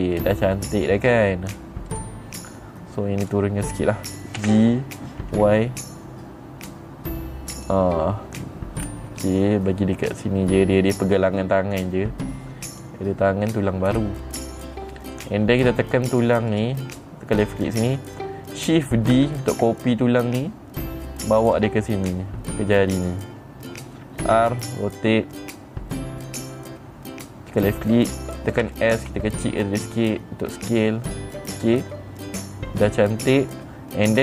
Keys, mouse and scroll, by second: 2.4 click, 3.8 click, 4.9 g, 8.0 click, 9.3 middle click, 9.4 scroll down 2, 13.2 click, 14.4 middle click, 14.4 scroll up 2, 15.7 click, 17.0 click, 19.7 shift+d, 21.9 click, 24.8 r, 28.0 click, 29.2 s, 32.8 click.